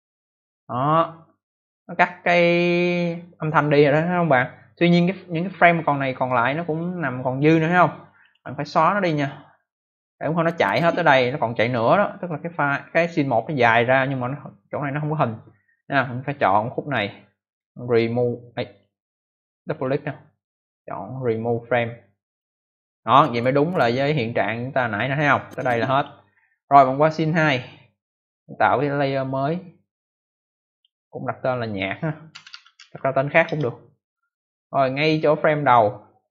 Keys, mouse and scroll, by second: 6.7 click, 8.0 click, 8.1 click, 8.2 click, 8.3 double click, 10.3 click, 17.4 right click, 18.6 click, 19.4 click, 19.7 double click, 20.3 right click, 22.2 click, 23.1 click, 24.0 click, 24.1 click, 25.2 click, 27.4 click, 28.9 click, 30.0 click, 31.3 click, 31.4 click, 31.5 double click, 32.0-33.2 typing, 33.4 Return, 34.9 click, 35.5 click.